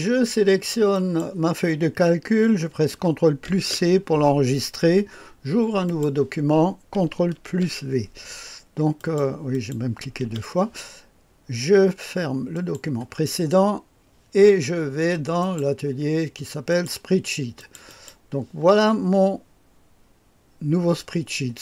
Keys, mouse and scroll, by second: 0.9 click, 3.4 ctrl+c, 5.8 click, 7.2 ctrl+v, 7.5 ctrl+v, 8.9-10.1 drag, 10.2 Delete, 12.5 click, 15.3 click, 16.6 click, 17.6 click, 17.9 click.